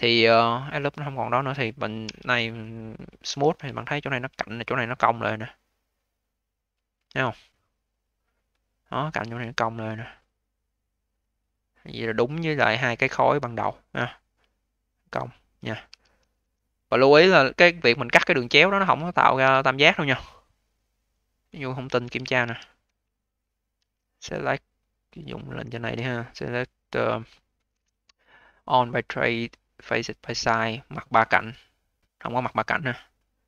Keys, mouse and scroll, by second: 0.9-2.0 scroll down 2, 2.0 q, 3.1 v, 3.7-6.6 alt+drag, 8.6-11.7 alt+drag, 11.7 scroll down 4, 12.0-13.2 alt+drag, 13.2 alt+middle click, 13.6-15.3 alt+drag, 15.3-15.8 scroll up 1, 15.8 q, 16.3 v, 16.6-17.0 scroll up 2, 17.0 alt+click, 17.6 alt+middle click, 18.0 alt+click, 18.6-20.2 scroll up 7, 20.2-20.9 scroll up 2, 20.9-21.5 scroll down 4, 21.5 alt+click, 22.3 d, 22.6-23.0 scroll down 3, 23.0 alt+click, 23.6 a, 25.6-28.7 drag, 31.2-33.4 drag.